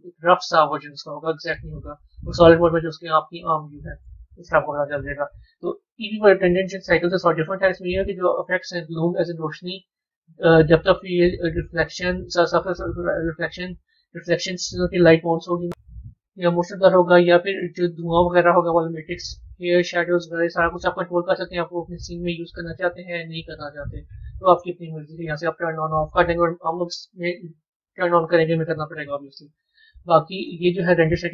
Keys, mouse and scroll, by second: 1.4 z, 2.8-6.0 middle drag, 11.9-15.6 drag, 17.5 click, 19.3 scroll down 1, 30.3 click.